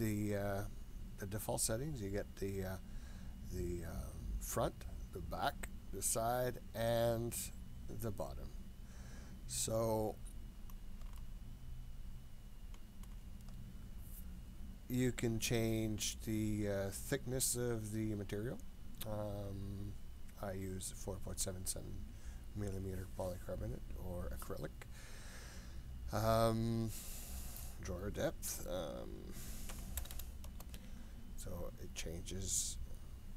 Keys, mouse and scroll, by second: 10.1-11.0 scroll up 2, 11.0 scroll up 1, 11.1-13.1 shift+middle drag, 13.1 shift+scroll up 1, 17.6-26.4 drag, 27.2-31.5 drag, 30.1 KP_0, 31.8-33.3 scroll down 2.